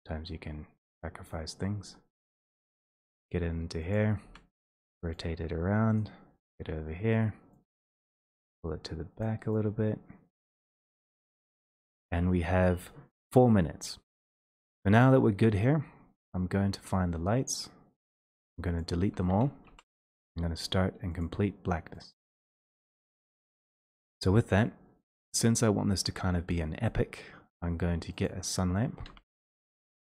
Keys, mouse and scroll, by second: 1.6 click, 2.8 middle click, 3.0 d, 4.3 click, 4.6 middle click, 4.8 e, 8.9 d, 8.9 w, 10.0 shift+click, 10.7 shift+click, 10.9 e, 11.5 click, 14.2 click, 15.1 click, 16.2 scroll down 6, 16.4-17.9 scroll up 12, 18.0 click, 19.8 middle click, 20.0 shift+Delete, 21.2 click, 22.1 click, 23.9 click, 25.5 click.